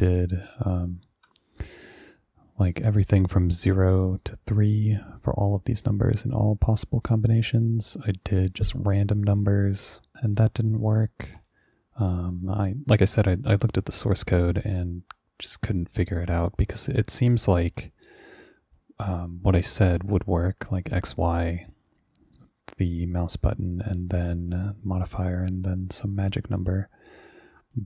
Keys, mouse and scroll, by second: 0.4-1.4 drag, 3.8 click, 8.5-10.2 drag, 11.5 click, 17.8 click, 18.2 click, 18.8-19.7 drag, 20.0 click, 24.6 click, 25.6 click, 27.7 click.